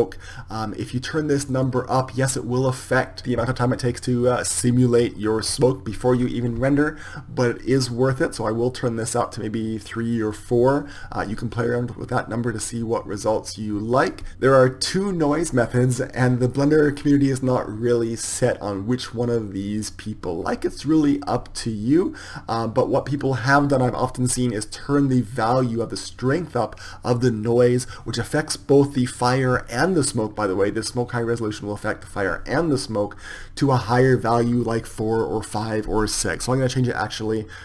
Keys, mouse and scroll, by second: 2.9 click, 11.2-29.7 drag, 33.9-37.6 drag.